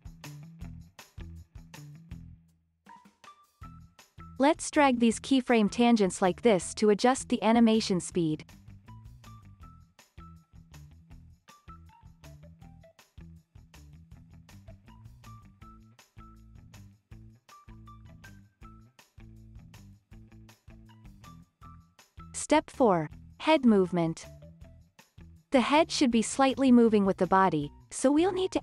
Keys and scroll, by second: 0.1 super+v, 1.3 space, 3.2 space, 8.3 space, 12.7 space, 18.0 space.